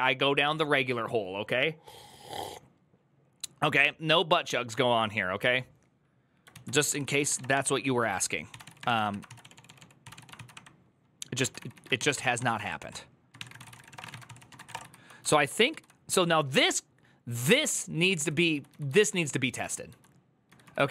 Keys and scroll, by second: 6.7 alt+{, 6.7 ctrl+c, 6.8-14.9 typing, 15.5 ctrl+u, 16.4-18.2 typing.